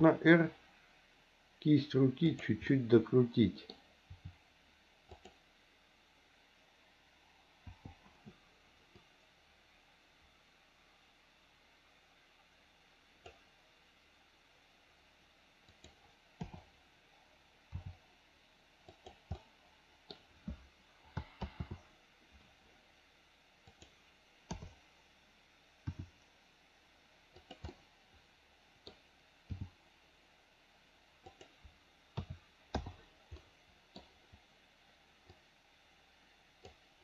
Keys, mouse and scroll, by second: 2.6-3.6 middle drag, 4.1 r, 7.7 i, 9.0-13.3 drag, 15.7 click, 16.4 KP_7, 17.7 r, 19.3 middle click, 21.4 ctrl+z, 23.7 click, 24.8 KP_7, 25.9 r, 27.7-28.8 middle drag, 29.5 g, 32.2 a, 32.8 i, 33.3 middle click, 35.3-36.7 drag.